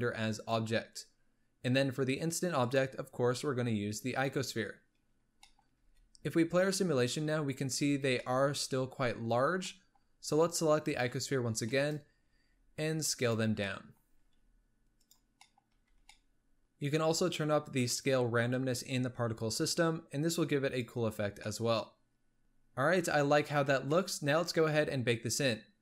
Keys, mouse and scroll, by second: 1.2-1.6 scroll down 4, 2.6-5.0 drag, 5.0-5.3 scroll up 3, 5.3 shift+middle click, 5.7 space, 7.9 space, 8.0 scroll down 1, 8.1-10.1 middle drag, 10.1-10.8 scroll down 3, 10.8 click, 11.2-11.6 scroll up 4, 11.6-11.9 shift+middle drag, 11.9-12.3 scroll up 4, 12.3 s, 13.5 scroll down 1, 13.6-14.2 middle drag, 14.2 s, 15.2 scroll down 1, 15.4-15.7 middle drag, 15.7 z, 16.0-16.6 middle drag, 18.4-21.3 drag, 21.3 scroll down 1, 21.4-22.4 middle drag, 22.4 space, 23.5-23.8 scroll down 1, 23.8-25.8 middle drag.